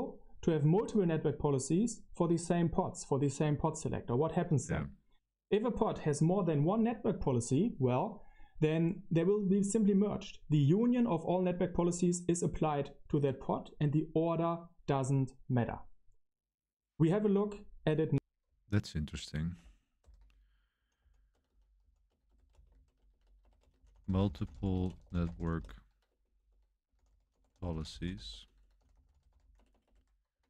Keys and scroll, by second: 20.1 super+7, 20.5-30.4 typing.